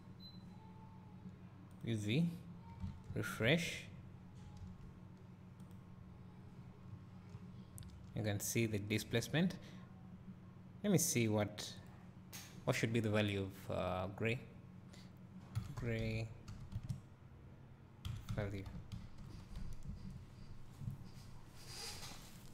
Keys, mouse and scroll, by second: 2.0 click, 3.3 alt+r, 5.9 click, 6.6 scroll up 2, 8.3 scroll up 2.